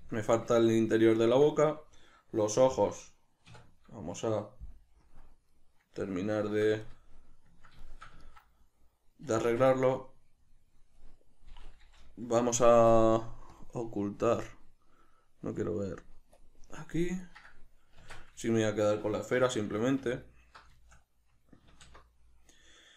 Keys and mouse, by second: 3.5 \, 5.0 KP_Decimal, 9.4 Tab, 9.8 right click, 13.5-14.1 drag, 14.1-15.5 middle drag, 15.5-17.2 drag, 17.2 right click, 18.0 Tab, 18.5 shift+middle click, 19.3 2, 20.1 alt+right click, 20.8-22.9 shift+middle drag, 21.7 alt+q.